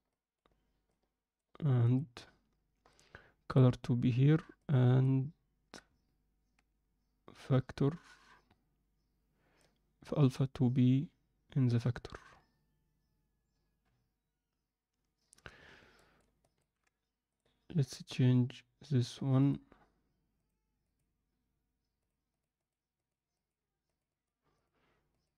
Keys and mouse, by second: 3.0-3.6 drag, 4.6 click, 9.5-10.4 drag, 16.0 ctrl+alt+middle click, 16.5 ctrl+alt+middle click, 17.2-25.3 drag.